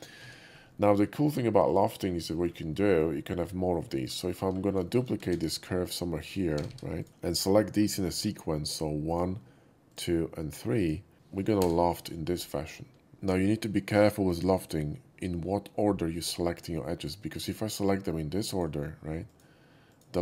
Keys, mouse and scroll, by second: 0.1 ctrl+z, 0.7 middle click, 1.6 click, 2.2 middle drag, 2.6 shift+middle drag, 2.9-3.6 scroll down 1, 3.6 scroll down 1, 3.8 alt+middle click, 4.1 alt+middle click, 4.7 scroll down 1, 4.8 shift+middle click, 5.2 shift+d, 6.5 g, 6.6 g, 6.9 click, 7.0 right click, 7.9 shift+middle click, 8.0-8.6 scroll up 1, 9.0 shift+click, 9.8 shift+click, 10.7 shift+click, 11.5 l, 12.0-13.1 middle drag, 17.3 click, 18.4 shift+click, 19.2 shift+click, 19.8 shift+click.